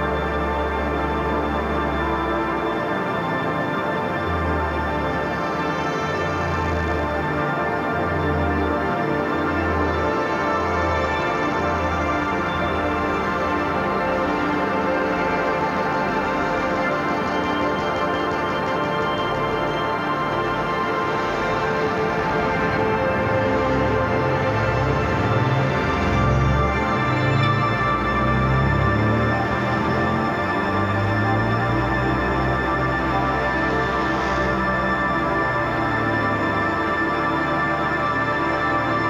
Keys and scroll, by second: 0.5 [, 1.2 ], 2.4 [, 2.8 ], 3.6 [, 4.0 ], 5.2 [, 7.4 ], 9.2 [, 11.9 [, 13.9 ], 14.8 [, 15.2 ], 16.0 [, 17.2 ], 20.2 [, 26.2 ], 28.1 [, 29.3 [, 29.6 ], 30.1 [, 31.9 [, 34.6 [, 35.8 ], 36.0 [, 36.3 ], 36.6 [, 38.7 space.